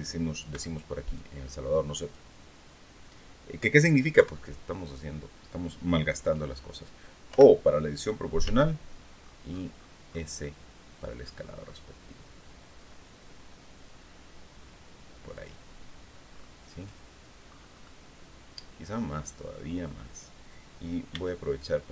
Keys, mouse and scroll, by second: 0.0 b, 0.6-1.8 drag, 3.6 KP_3, 6.8 o, 7.9 s, 8.7-9.0 scroll down 2, 9.6-10.2 scroll down 4, 10.4-11.1 scroll down 4, 12.2-13.1 scroll down 6, 13.6 scroll down 2, 14.8 click, 15.8-16.5 scroll down 4, 16.9-17.7 scroll up 2, 20.6 b, 21.1-21.9 drag.